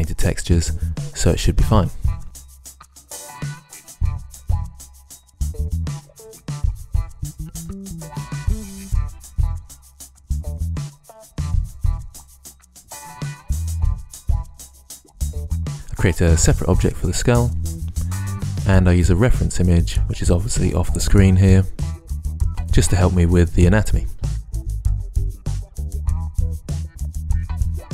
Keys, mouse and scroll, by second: 1.8-4.1 typing, 5.2 shift+s, 5.4 shift+a, 6.6 ctrl+r, 7.4 a, 7.7 ctrl+z, 7.8 ctrl+z, 8.1 KP_3, 8.4 KP_1, 9.1 ctrl+z, 9.8 a, 10.1 a, 10.2 KP_1, 11.4 KP_1, 12.1 ctrl+r, 12.8 ctrl+r, 13.2 l, 14.4 right click, 15.0 click, 15.1 ctrl+z, 15.2 s, 16.3 ctrl+Tab, 17.6 click, 17.7 click, 18.5-21.1 typing, 20.5 Delete, 21.8 Delete, 25.4 e, 25.6 g, 25.7 ctrl+r, 26.2 z, 26.5 ctrl+Tab, 26.6 click.